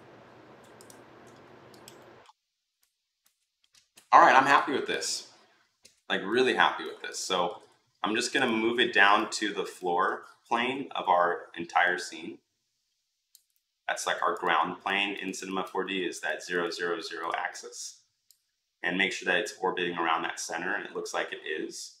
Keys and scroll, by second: 10.3 e.